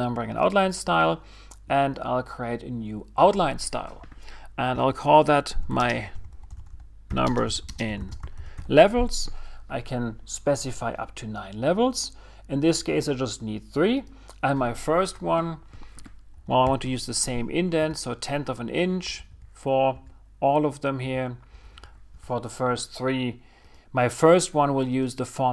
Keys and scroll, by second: 7.5 shift+m, 10.7 typing, 18.3 typing, 19.8 Tab.